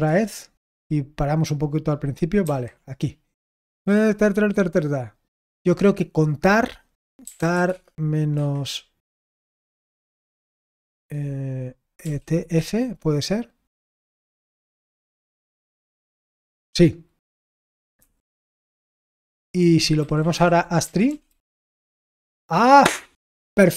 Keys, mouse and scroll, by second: 5.7-14.7 drag, 14.8 ctrl+s.